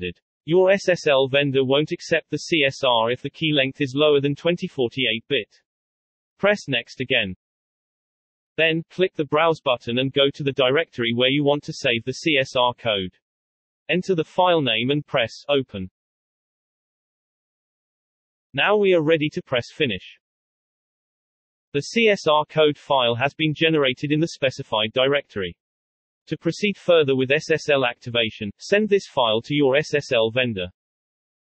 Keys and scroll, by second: 28.7 ctrl+a.